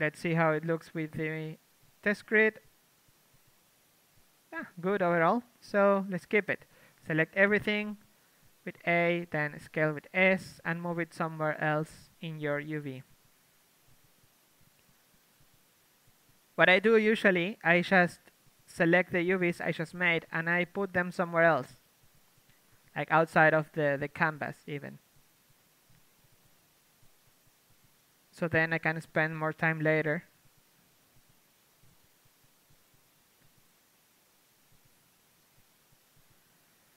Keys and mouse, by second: 1.0 a, 4.4 click, 4.7 Tab, 5.1 KP_3, 6.5 Tab, 7.5-11.3 typing, 12.5-22.5 typing, 17.1 click, 24.8 click, 24.8-26.5 typing, 25.8 click, 29.5 g, 29.8-31.5 drag, 29.8 r, 30.3 s, 30.7 g, 32.2 click, 32.2 r, 33.4-35.8 drag, 33.4 g, 33.5 r, 34.0 g, 34.6 a, 35.8 k, 35.8 l, 36.2 click, 36.5 click, 36.5 l.